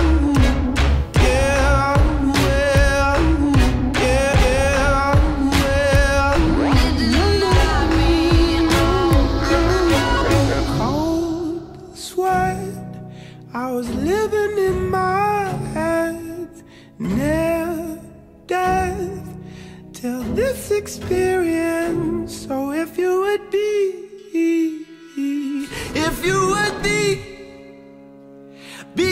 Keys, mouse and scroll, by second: 0.0 click, 1.6-2.9 drag, 3.6 click, 4.8-6.2 drag, 7.5-8.7 drag, 9.2-10.2 drag, 11.8 click, 13.5-15.0 drag, 16.7-26.7 drag.